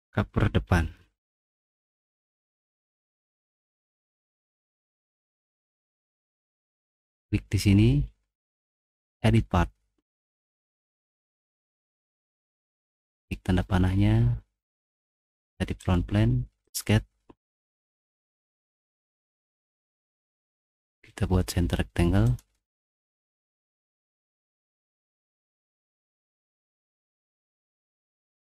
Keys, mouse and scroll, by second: 6.8 right click, 8.0 right click, 8.9 click, 11.1 click, 11.5 right click, 13.1 click, 15.8 click, 16.6 click, 16.7 right click, 18.0 middle click, 18.6 middle click, 20.1 right click, 22.2 click, 23.3 middle click, 23.6 middle click, 23.9 middle click, 24.2 middle click, 25.6 middle click, 25.6-26.0 scroll up 4, 25.9 middle click, 26.1 middle click, 27.1 click, 27.7 click, 28.1 click, 28.3 click.